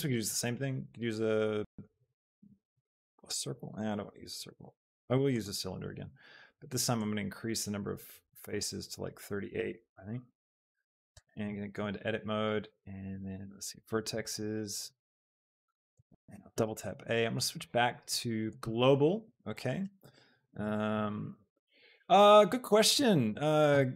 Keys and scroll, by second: 11.1 shift+Tab, 15.5 shift+KP_7, 16.3 a.